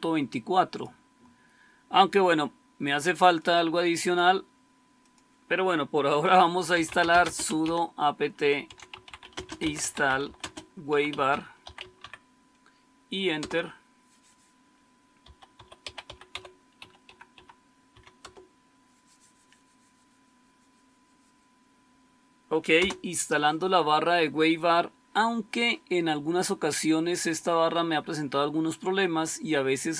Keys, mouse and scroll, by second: 6.4-7.5 typing, 8.6-13.8 typing, 15.0-18.3 typing, 22.7 Return.